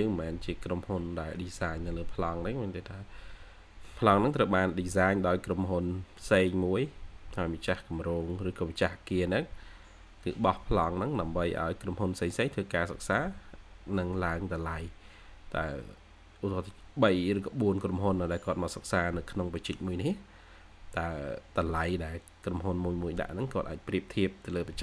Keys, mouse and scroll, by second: 2.9-4.5 scroll down 1, 4.5-5.4 scroll up 1, 5.4 middle click, 6.1-6.8 scroll up 1, 7.3 middle click, 16.0 scroll down 1.